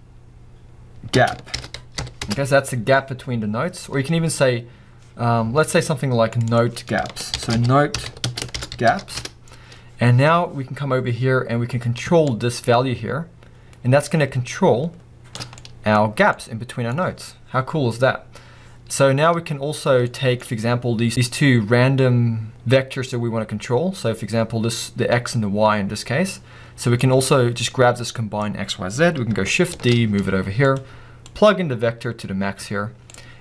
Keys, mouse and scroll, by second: 2.9 Return, 9.2 click, 9.9 Return, 12.7 shift+click, 15.6 middle click, 15.9-16.3 scroll up 2, 29.8 shift+d, 32.2 click, 33.3 click.